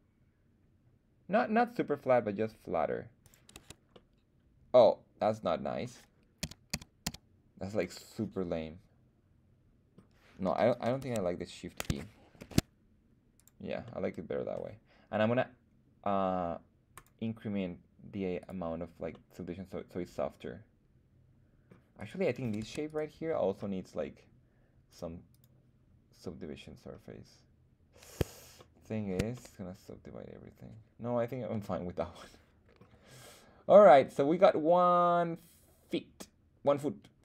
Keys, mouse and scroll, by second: 3.2 click, 3.5 Tab, 3.9-5.8 middle drag, 6.4 z, 6.7 z, 7.0 z, 7.8-10.0 middle drag, 11.0 Tab, 12.4 shift+e, 13.3 click, 13.8 middle click, 16.9 click, 18.4 click, 19.1-21.6 middle drag, 21.9 click, 21.9 right click, 22.6 Tab, 22.8 click, 22.8 right click, 24.8 click, 25.3-28.2 drag, 28.5-29.1 shift+middle drag, 29.3-31.8 middle drag, 32.2 middle click, 33.8-37.2 middle drag.